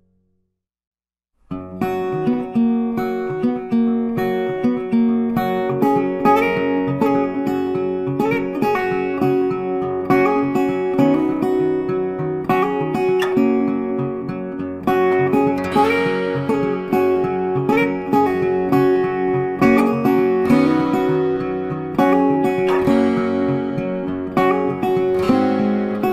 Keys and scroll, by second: 1.9 ctrl+z, 8.2 ctrl+z, 11.4 ctrl+c, 11.6 ctrl+f, 14.8 ctrl+z, 18.8 ctrl+z.